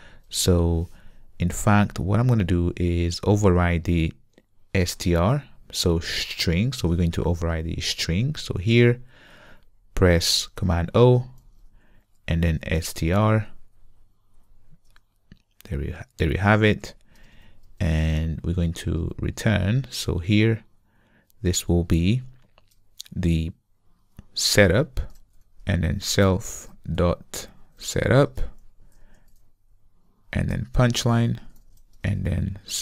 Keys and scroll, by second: 8.8 super+n, 11.4 ctrl+o, 17.2 alt+BackSpace, 26.7 Return, 27.8 Return.